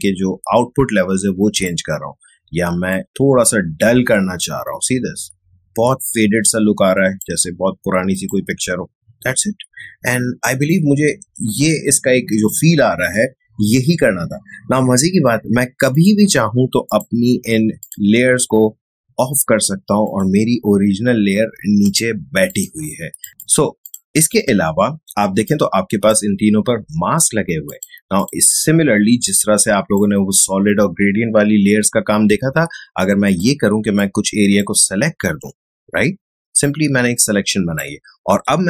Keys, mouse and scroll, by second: 15.9 click, 23.3-27.7 drag, 28.1-38.6 shift+drag.